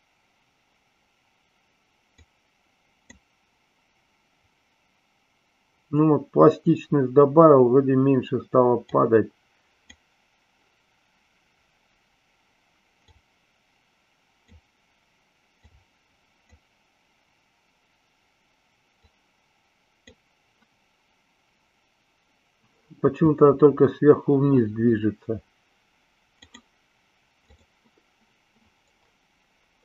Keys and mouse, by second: 2.2-3.2 drag, 8.8-10.0 drag, 13.2-14.6 drag, 15.7 click, 19.1-20.1 drag, 27.4 click.